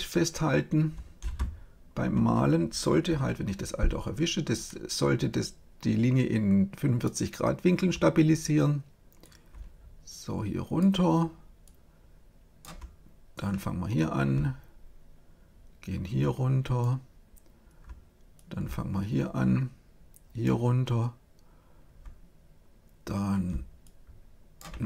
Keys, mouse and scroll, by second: 9.1-11.0 drag, 11.0 click, 11.6-13.2 drag, 13.9-15.6 drag, 18.3-19.9 drag, 23.8-24.8 drag.